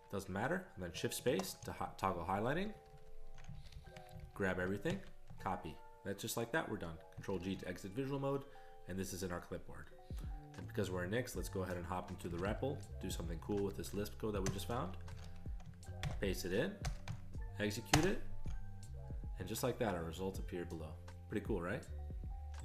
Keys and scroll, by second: 1.3 shift+space, 2.1 ctrl+n, 2.7 ctrl+n, 2.9 ctrl+n, 3.6 alt+f, 3.7 alt+f, 4.9 alt+w, 7.3 ctrl+g, 12.3 ctrl+x, 12.5 b, 13.7 ctrl+n, 14.5 Return, 15.1 ctrl+x, 15.2 h, 16.0 ctrl+y, 16.8 Return, 17.9 ctrl+Return.